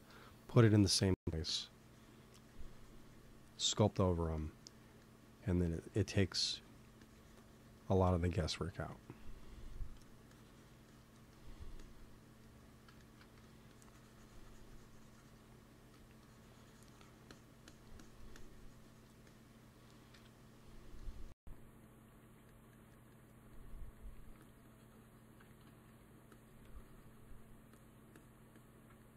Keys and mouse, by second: 0.0 f, 3.3-4.9 drag, 4.9-6.7 middle drag, 7.3-8.3 drag, 8.3 middle click, 9.1 click, 9.6 middle click, 10.2-15.3 drag, 13.2 f, 15.8 f, 16.3-17.6 drag, 20.0 KP_1, 24.2 f, 24.5-29.1 drag, 25.7 f.